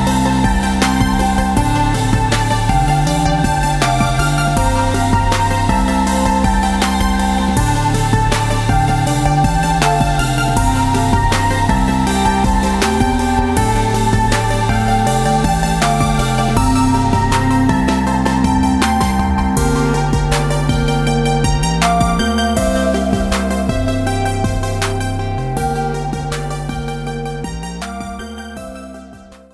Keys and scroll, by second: 1.2 ctrl+y, 16.6 ctrl+y, 18.8 ctrl+-, 19.2 ctrl+-, 20.1 v, 21.0 Tab, 21.7 space, 22.3 space, 23.1 ctrl+-, 24.3 ctrl+s.